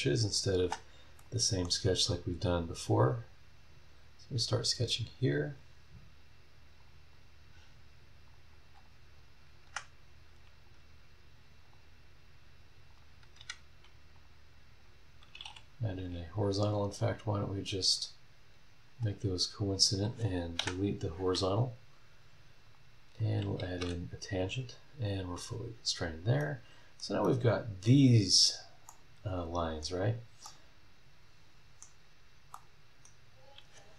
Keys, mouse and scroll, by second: 0.6 space, 1.2 middle click, 1.2 click, 2.0 scroll down 2, 3.2 click, 5.4 click, 6.8 click, 7.1 scroll down 2, 7.6 scroll up 2, 8.2 click, 8.8 click, 9.6 Escape, 11.6 click, 12.9 click, 13.4 Escape, 14.1 click, 14.8 click, 15.5 h, 16.6 click, 17.3 click, 17.9 click, 19.9 click, 20.6 Delete, 21.3 scroll up 1, 22.6 click, 23.2 click, 23.8 t, 25.3 click, 26.1 scroll down 1, 26.4 middle click, 26.5 right click, 26.7 scroll up 1, 27.2 middle click, 27.3 right click, 28.1 scroll down 1, 28.4-28.7 scroll up 1, 28.8-30.0 middle drag, 30.0 scroll down 1, 30.4 middle click, 30.5-32.0 right drag, 32.0 scroll down 1, 32.5 middle click, 32.6 right click, 33.3 scroll up 1.